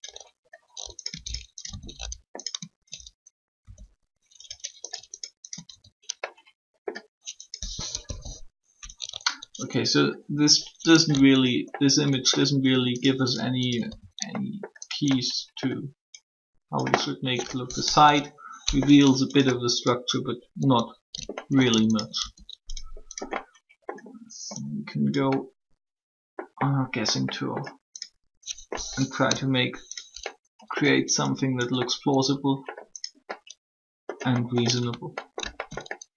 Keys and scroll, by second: 3.6 shift+e, 7.9 1, 17.8 3, 29.2 3.